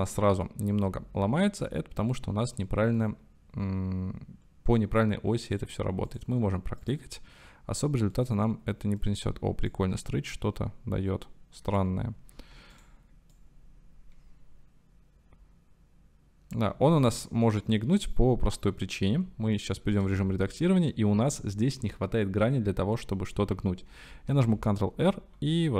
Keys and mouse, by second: 0.2-3.1 middle drag, 5.5 click, 6.1 click, 6.8 click, 8.1-9.0 middle drag, 9.8-11.9 middle drag, 12.2 ctrl+z, 12.7-16.7 middle drag, 17.0 ctrl+z, 17.9 click, 19.1 Tab, 19.6 click, 20.2 shift+click, 23.0 click, 24.5 ctrl+r.